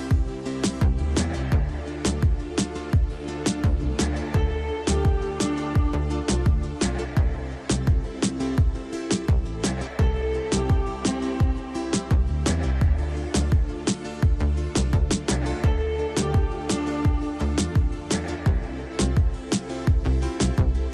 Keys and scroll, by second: 8.0 shift+Page_Up, 8.7 Escape, 9.1 F2, 13.2 F3, 15.4 F4, 15.7 Escape, 16.6 ctrl+r, 17.1 Escape, 18.6 ctrl+r, 20.8 Escape.